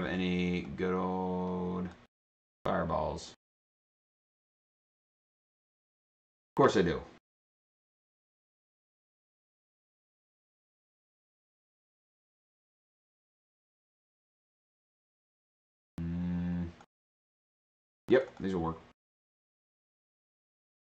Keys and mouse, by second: 0.7-2.0 drag, 6.3 click, 6.4 click, 7.8 click, 9.0 click, 9.1 click, 12.2 click, 12.4 click, 13.9 click, 14.8 click, 16.8 click, 18.2 click, 18.3 click, 20.1 click, 20.2 click.